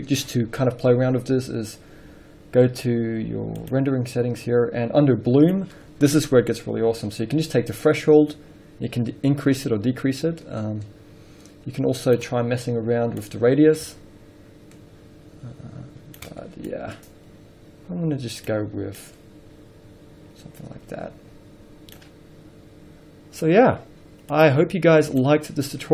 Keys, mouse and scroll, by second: 0.0-6.3 drag, 6.3 scroll up 1, 8.5-25.9 drag, 22.6 scroll down 1, 23.5-24.7 scroll up 1.